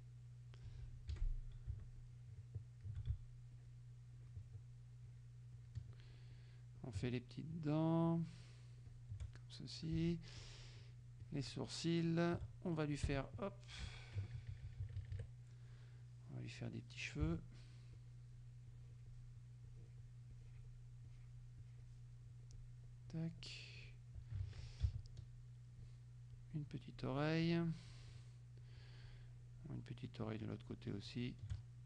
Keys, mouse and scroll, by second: 0.0 click, 1.2 F6, 2.0 shift+click, 3.6 shift+click, 4.2 shift+click, 5.1 shift+click, 5.6 shift+click, 6.4 shift+click, 6.9 shift+click, 7.6 shift+click, 8.2 shift+click, 9.0 shift+click, 9.5 shift+middle click, 10.5 shift+click, 11.3 shift+click, 12.5 shift+middle click, 13.1 shift+Escape, 13.9 KP_3, 14.2 KP_Subtract, 16.3 click, 16.7 click, 18.0 shift+click, 18.7 shift+click, 19.7 shift+click, 20.4 shift+click, 21.2 shift+click, 22.6 shift+click, 23.2 shift+click, 24.5 ctrl+shift+z, 25.1 ctrl+shift+click, 26.4 shift+click, 27.5 shift+click, 28.0 shift+click, 29.1 shift+click, 30.5 shift+click, 31.2 shift+click, 31.7 shift+middle click.